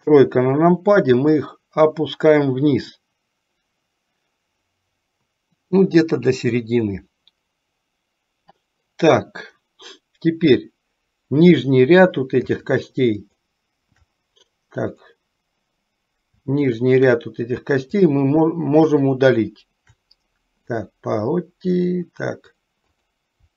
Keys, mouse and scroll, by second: 0.2 KP_3, 1.6-6.7 drag, 12.7 alt+shift+click, 14.9 click, 16.8 shift+click, 18.1 shift+click, 19.1 shift+click, 22.0 middle click, 22.9 click.